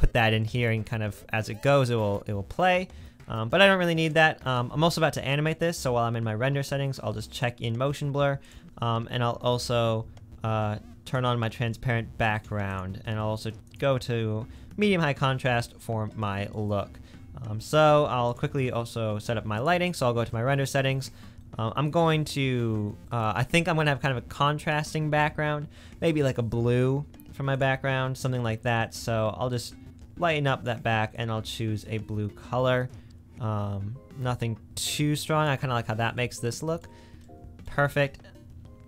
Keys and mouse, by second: 15.7 middle drag, 20.4-20.7 middle drag, 22.1-23.7 middle drag, 23.9 middle click, 24.5 middle click, 24.9 middle click.